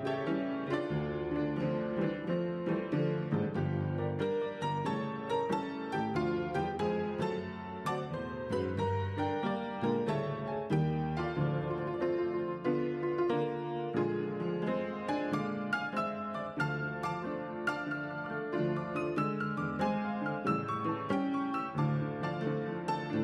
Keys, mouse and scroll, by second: 0.0 Left, 0.2 Left, 1.6 Right, 8.3 Left, 8.5 Down, 12.9 Right, 22.6 click.